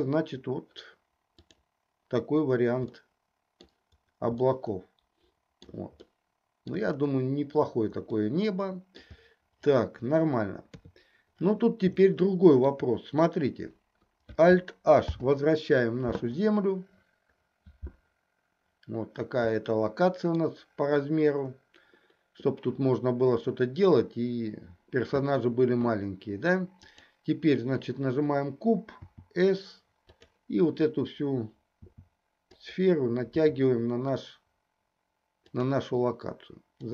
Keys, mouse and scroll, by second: 0.0 click, 1.7 click, 3.0-3.8 middle drag, 4.6-5.8 shift+middle drag, 6.1-6.8 shift+middle drag, 8.3-9.1 middle drag, 10.7 KP_3, 12.1-12.7 shift+middle drag, 15.1 alt+h, 19.7-20.5 middle drag, 29.1 s, 31.8 s, 33.5 s.